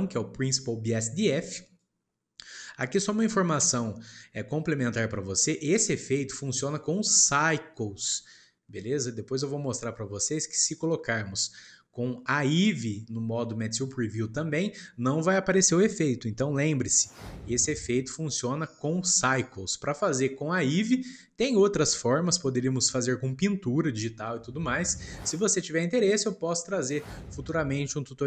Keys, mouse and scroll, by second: 1.2 click, 1.8 click, 3.1-6.2 shift+middle drag, 20.4-23.4 shift+middle drag, 24.9-28.2 shift+middle drag.